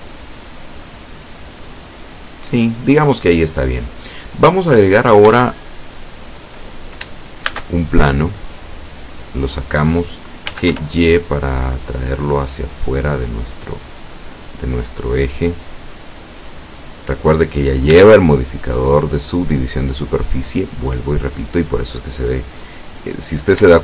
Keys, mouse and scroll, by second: 5.0 scroll down 1, 5.6-6.7 shift+middle drag, 7.6 shift+a, 8.7 click, 10.5 g, 10.8 y, 13.3 click, 13.7 middle click, 16.0-17.3 drag, 17.5-17.9 scroll up 1, 18.3-19.3 shift+drag, 19.3 shift+scroll up 1, 20.3 click.